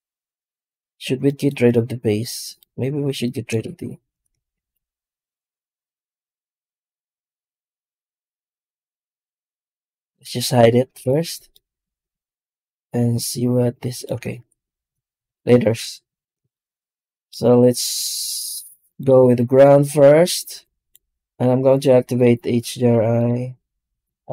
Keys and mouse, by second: 0.9 Tab, 1.2 middle click, 2.3-2.8 right drag, 3.5 alt+shift+z, 4.4 g, 8.0 g, 10.9 h, 13.9 middle click, 14.3 ctrl+z, 15.1 alt+a, 18.7-20.8 right drag, 22.6-24.3 drag.